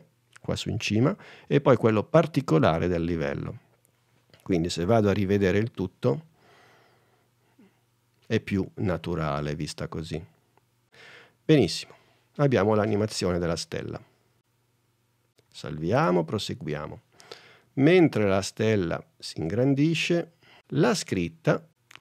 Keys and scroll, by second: 15.6 super+s, 16.1 super+n.